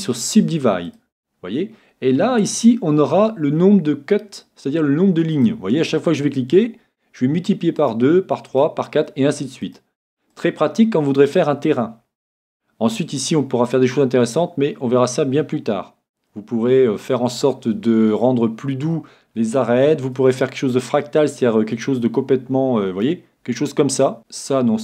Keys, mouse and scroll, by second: 0.9-2.8 drag, 5.3-7.1 drag, 7.8-12.2 drag, 12.1-13.9 middle drag, 14.3-17.1 middle drag, 14.3-15.3 scroll up 1, 15.3-17.1 scroll up 1, 19.7-21.7 middle drag, 21.8-23.6 drag, 24.2 click.